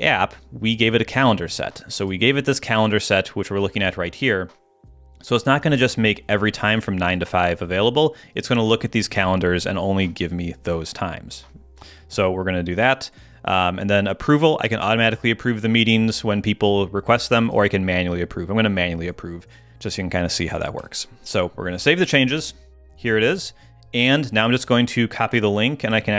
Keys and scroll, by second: 9.1 super+Tab.